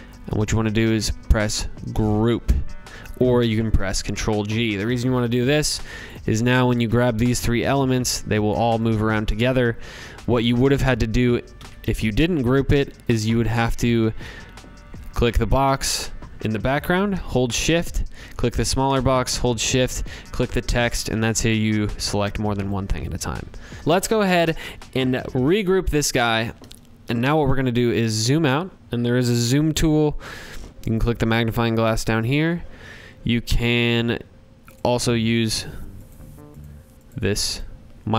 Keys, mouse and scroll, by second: 1.2 click, 5.1 click, 6.8 click, 7.4 click, 8.2 click, 8.6 click, 9.3 ctrl+z, 9.8 ctrl+z, 10.5 ctrl+z, 11.2 click, 12.3 click, 12.7 click, 13.1 ctrl+z, 14.1 click, 16.8 shift+click, 18.7 click, 21.6 click, 23.8 click, 24.3 ctrl+g, 25.1 click, 26.4 z, 33.7 click, 34.3 click, 35.1 click, 35.6 click, 35.9 click, 36.4 click, 36.5-38.1 drag.